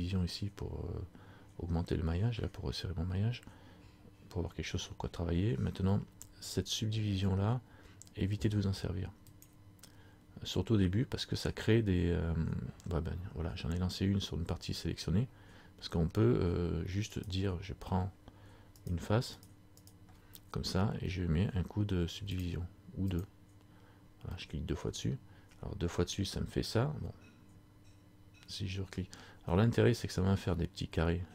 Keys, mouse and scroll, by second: 9.5 click, 13.2-14.3 scroll up 1, 17.3 right click, 18.9 shift+right click, 22.4 click, 24.3 scroll up 1, 24.6 middle click.